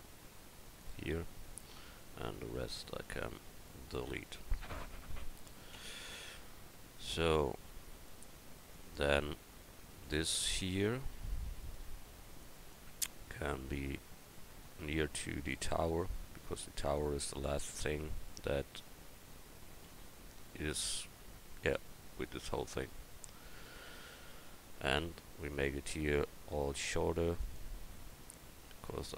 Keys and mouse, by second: 2.5-4.5 right drag, 2.9 x, 5.3 middle click, 7.0 Tab, 8.7-15.2 right drag, 9.9 Tab, 13.7-15.5 drag, 15.8-16.9 middle drag, 16.9 right click, 17.0-19.3 drag, 19.9 a, 20.5-25.1 middle drag, 25.1 ctrl+r, 28.1 middle click.